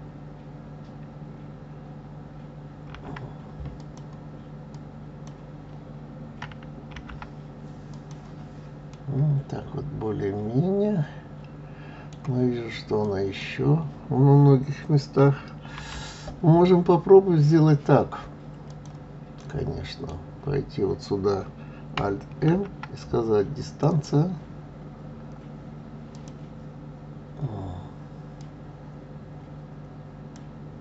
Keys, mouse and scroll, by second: 4.7 click, 6.9 alt+m, 8.9-12.0 middle drag, 13.0 click, 15.7 alt+m, 19.4 middle click, 20.2 scroll down 1, 21.0-21.8 scroll up 1, 22.5 alt+m, 23.9 click, 26.1 click, 28.4 click.